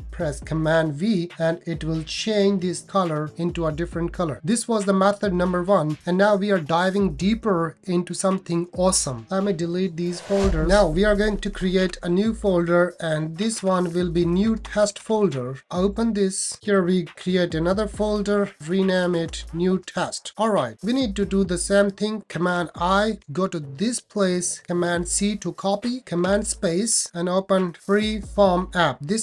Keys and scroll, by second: 0.6 super+v, 9.4 super+BackSpace, 11.8 shift+super+n, 13.4 shift+n, 14.6 shift+t, 17.1 shift+super+n, 18.3 super+v, 22.5 super+i, 24.9 super+c, 26.2 super+space, 26.3 super+space.